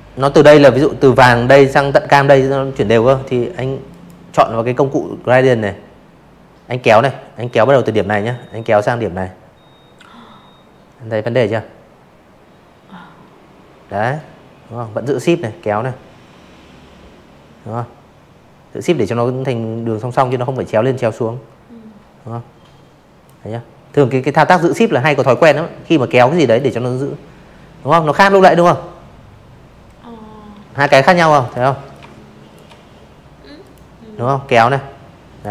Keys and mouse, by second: 0.8 click, 5.0-20.2 shift+drag, 22.3 click, 23.1 v, 23.5 click, 25.2 click, 27.9 ctrl+z, 28.4 click, 28.8-29.5 alt+shift+drag, 30.5 click, 31.5 shift+click, 33.0 ctrl+z, 34.0-35.5 shift+drag.